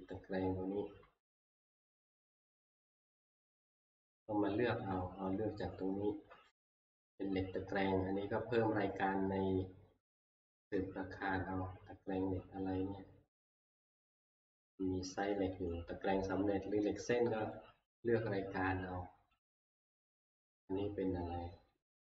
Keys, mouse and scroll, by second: 0.8 Escape, 3.2 click, 5.0 click, 13.7 click, 13.9 click, 14.2 click, 14.3 click, 14.6 click, 15.7 click, 17.6 click, 19.5 click.